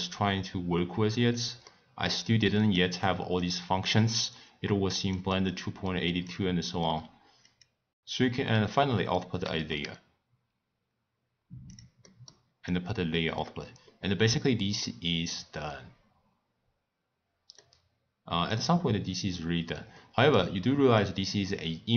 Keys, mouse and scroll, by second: 1.7-3.4 middle drag, 3.4 click, 4.2 click, 5.5 click, 7.4-11.0 drag, 12.0-12.6 middle drag, 12.6 click, 17.6-21.0 middle drag, 21.0 click.